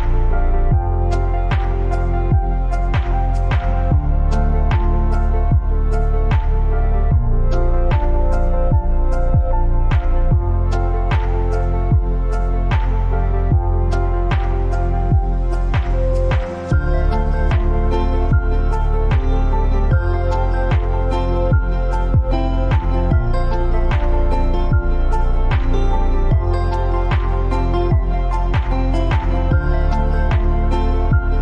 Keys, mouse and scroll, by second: 5.1 Up, 5.7-11.1 drag, 13.1 right click, 15.3 click, 19.0 ctrl+v, 19.9 click, 22.8 click, 26.8 Down.